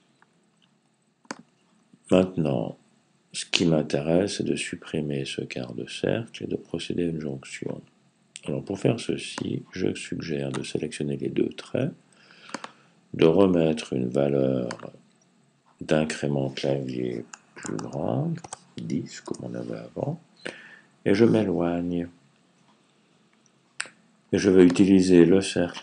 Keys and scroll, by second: 17.2-18.1 typing, 20.4 Left.